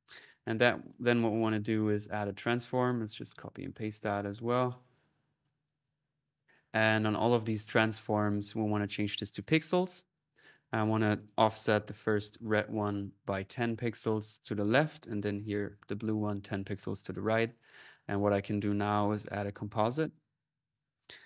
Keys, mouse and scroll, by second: 0.2 right click, 0.5-2.9 drag, 1.6-4.0 typing, 4.2-6.6 ctrl+drag, 6.6-7.9 drag, 8.6-11.4 drag, 13.5 click, 14.2 click, 17.2 click, 18.0 right click, 18.3 click, 18.9-19.6 typing, 20.0 click, 20.7 right click.